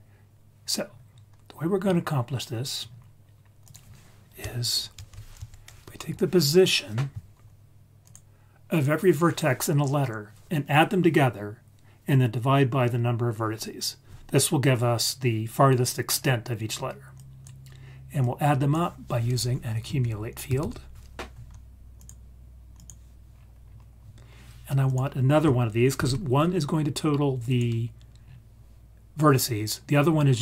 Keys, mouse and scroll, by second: 0.7-1.8 scroll up 6, 1.8-2.8 scroll down 1, 2.8 scroll up 2, 3.6 click, 5.2 shift+a, 17.1 click, 18.2-22.0 drag, 20.5 c, 22.7 click, 23.2 scroll down 2, 23.6-24.8 scroll up 3, 24.8 click, 25.9 shift+d, 27.4 click, 28.2-28.9 scroll down 1, 28.9-29.7 scroll down 1, 29.7-30.4 scroll up 2.